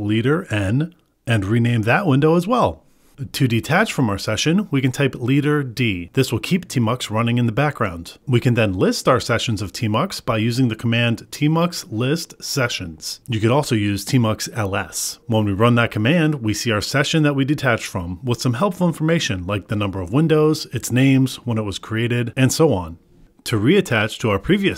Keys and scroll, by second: 0.3 ctrl+b, 2.0 ctrl+b, 3.2 Return, 5.1 ctrl+b, 15.4 Return.